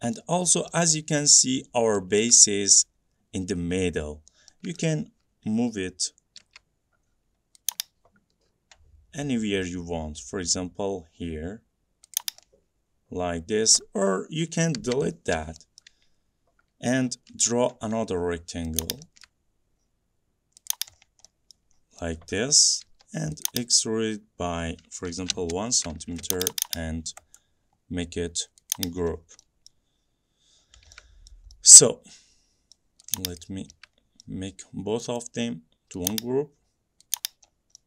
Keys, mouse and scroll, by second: 0.3 middle click, 0.5 middle click, 0.6 middle click, 0.6 middle click, 2.0 middle click, 2.1 middle click, 2.3 scroll down 2, 2.5 middle click, 4.3 middle click, 4.4 middle click, 4.9 middle click, 5.0 scroll up 3, 6.6-7.6 scroll, 6.6 m, 7.8 click, 12.3 click, 13.9 middle click, 14.9 Delete, 15.4 scroll up 2, 15.9 middle click, 16.2 scroll up 1, 16.3 middle click, 17.1 middle click, 17.3 middle click, 17.5 r, 18.1 middle click, 18.2 middle click, 18.9 click, 19.3-19.9 shift+scroll down 2, 19.4 shift+middle click, 19.9 middle click, 20.0 middle click, 20.1 middle click, 20.8 click, 21.1 middle click, 21.2 middle click, 21.6 middle click, 21.9 middle click, 22.4 middle click, 23.0 p, 23.6 click, 25.2 1, 25.5 Return, 26.4 click, 26.5 click, 26.7 click, 27.5 right click, 28.8 click, 29.3 middle click, 29.5 middle click, 29.8 middle click, 30.1 middle click, 30.2 middle click, 30.7 middle click, 31.0 middle click, 31.4 middle click, 32.9 middle click, 33.5 click, 34.3 middle click, 35.3 right click, 36.2 click, 37.3 click, 37.6 middle click, 37.7 middle click, 37.7 middle click.